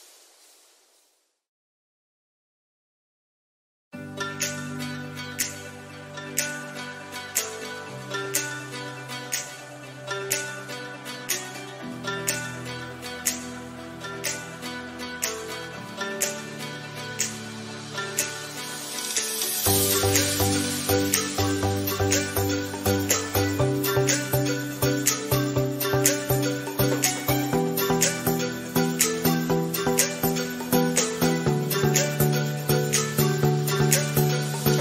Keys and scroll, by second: 0.3 ctrl+d, 3.4 ctrl+j, 20.3 ctrl+d, 29.9 ctrl+z, 31.1 ctrl+j, 31.6 ctrl+z, 32.7 ctrl+j.